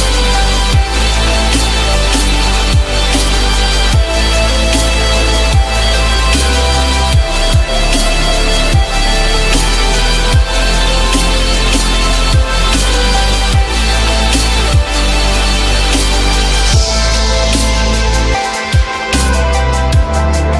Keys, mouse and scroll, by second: 4.8 alt+q, 6.4 alt+middle click, 7.9 alt+scroll up 1, 12.1 ctrl+click, 12.9 alt+middle click, 14.8 ctrl+click, 15.4 alt+middle click, 16.6 ctrl+click, 17.3 ctrl+z, 17.9 ctrl+click, 19.2 ctrl+click, 19.8 alt+middle click, 19.9-20.5 alt+scroll up 1.